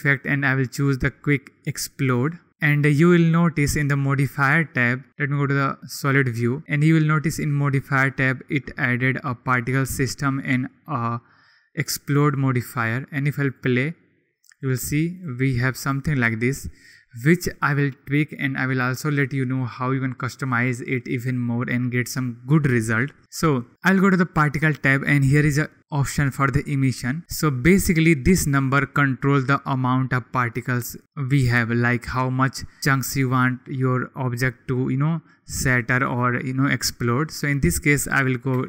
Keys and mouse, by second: 5.2 click, 13.5 click, 15.8 click, 24.1 click, 37.5-38.6 drag.